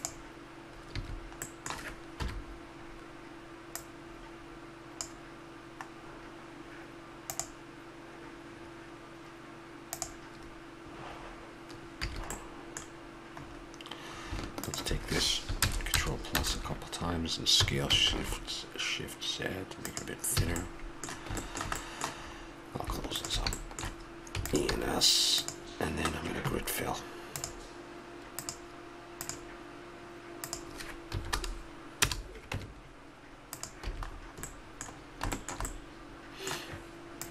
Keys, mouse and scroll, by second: 1.0 a, 1.4 middle click, 2.2 KP_1, 3.8-5.6 drag, 6.0-7.4 middle drag, 11.1-12.4 middle drag, 12.0 a, 13.4-14.6 middle drag, 14.6 right click, 15.6 ctrl+KP_Add, 17.6 s, 20.4 a, 24.4 e, 24.7 s, 30.4-32.3 drag, 32.5 Tab, 33.9 a, 34.1-37.3 middle drag.